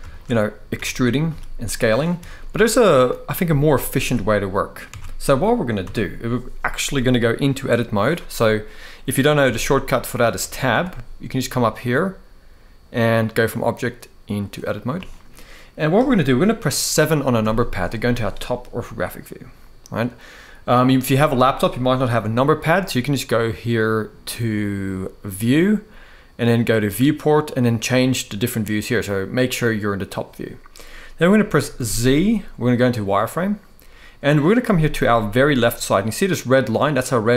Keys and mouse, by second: 0.5 e, 0.8 click, 1.4 click, 1.4 s, 2.1 ctrl+z, 2.7 ctrl+z, 4.6 Tab, 5.5 Tab, 9.1 Tab, 10.1 Tab, 10.4 Tab, 11.4-14.1 drag, 14.8 middle click, 17.1 KP_7, 25.2-29.7 drag, 31.5 z, 35.5-37.3 drag.